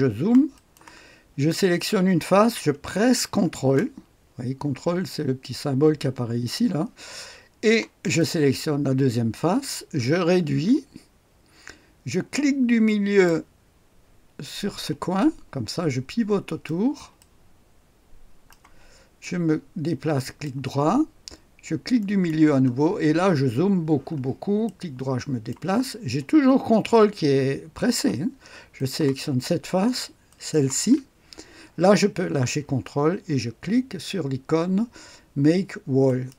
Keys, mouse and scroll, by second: 7.9 ctrl+click, 9.0-11.7 ctrl+scroll down 3, 15.1-18.0 ctrl+drag, 18.4 ctrl+click, 19.1 ctrl+right click, 20.7 ctrl+click, 21.9 ctrl+middle click, 22.5-25.4 scroll up 1, 24.6-25.8 ctrl+drag, 28.7 ctrl+click, 30.2 ctrl+click, 36.0-36.3 drag.